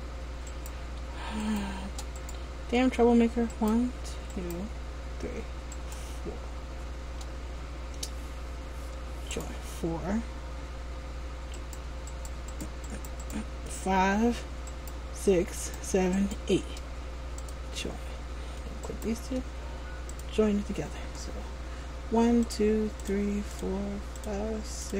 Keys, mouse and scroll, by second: 0.6 shift+right click, 1.6 right click, 2.3 right click, 3.7 shift+right click, 4.5 shift+right click, 5.9 shift+right click, 9.4 click, 11.7 right click, 13.0 right click, 14.9 right click, 15.7 shift+right click, 16.3 right click, 16.5 shift+right click, 17.5 click, 19.0 shift+right click, 20.2 click.